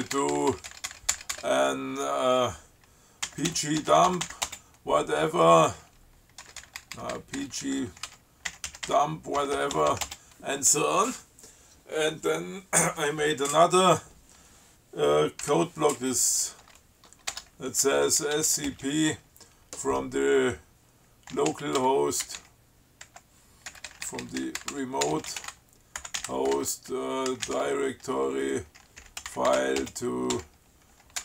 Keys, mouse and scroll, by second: 3.3-5.5 typing, 6.7-10.3 typing, 14.1 click, 15.7 <, 16.8 s, 17.6 Tab, 18.2-19.2 typing, 21.3-31.2 typing.